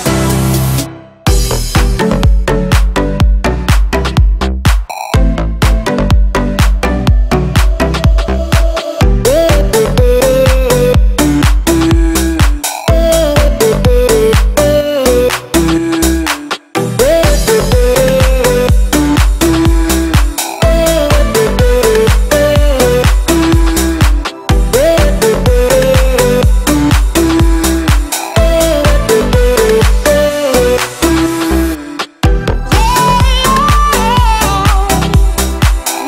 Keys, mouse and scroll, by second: 0.2-3.2 middle drag, 3.2 scroll down 1, 3.8 shift+click, 4.8 middle click, 5.8 scroll up 1, 7.8 ctrl+x, 9.1 p, 9.4 click, 10.1-11.9 typing, 12.6 click, 13.0 right click, 14.0 click, 16.6 right click, 17.4 click, 19.2-21.4 typing, 19.3 click, 21.9 middle click, 22.6 click, 24.8 space, 25.0 click, 26.0-26.4 scroll up 1, 26.4 middle click, 27.0 scroll down 1, 27.6 m, 27.9 click, 29.0 Left, 29.3 click, 29.4 space, 29.9-30.5 scroll up 1, 32.4 m, 33.1 click, 33.8-34.1 scroll down 1, 34.6 Left, 35.6 click, 35.8 space, 35.9-36.0 scroll down 1.